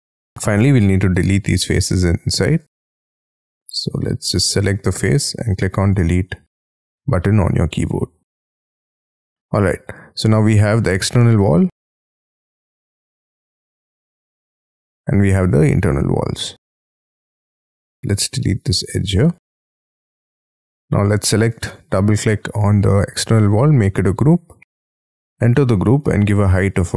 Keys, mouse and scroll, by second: 0.2-1.2 scroll up 4, 1.2-1.6 scroll up 1, 1.6 Delete, 1.7 Delete, 2.4 Delete, 2.9 Delete, 3.4 Delete, 4.0 Delete, 4.4 scroll up 5, 5.2 Delete, 5.9 Delete, 6.1-6.4 scroll down 6, 6.4 scroll up 5, 7.1 Delete, 7.4 Delete, 7.8-9.0 scroll down 10, 9.0 middle click, 9.5 scroll down 1, 9.7-10.8 scroll up 13, 11.0 double click, 11.5-11.9 scroll down 1, 11.9 double click, 12.3-12.7 scroll down 5, 12.7-13.4 scroll up 2, 13.4-14.3 scroll down 11, 14.3-16.4 scroll up 19, 16.4-16.9 scroll down 14, 17.0 scroll up 1, 17.3 scroll down 4, 17.5-18.4 scroll up 16, 18.4 e, 19.0 space, 19.1 scroll up 1, 19.5-20.5 scroll down 23, 20.5-21.1 scroll up 14, 21.6 double click, 22.0-23.0 scroll down 13, 23.0-23.7 scroll up 6, 23.7 g, 24.6 double click, 25.6 p.